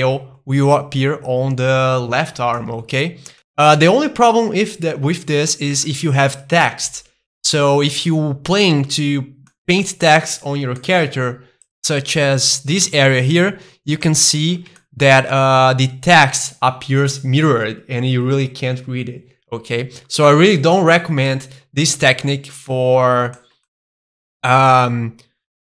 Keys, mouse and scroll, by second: 2.5-5.4 shift+middle drag, 3.0-3.3 scroll down 2, 5.5-5.8 scroll down 2, 5.8-7.5 middle drag, 7.5 Tab, 8.5 a, 9.5-11.5 middle drag, 11.7 click, 12.1 middle click, 12.9 a, 14.1-16.8 shift+middle drag, 19.7-22.7 middle drag, 22.7 Tab, 23.1 middle click, 23.7-25.7 middle drag.